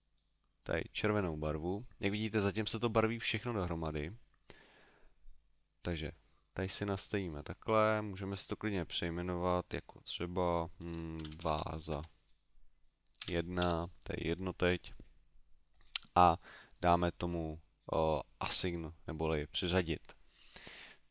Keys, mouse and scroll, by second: 8.3 click, 16.7 click.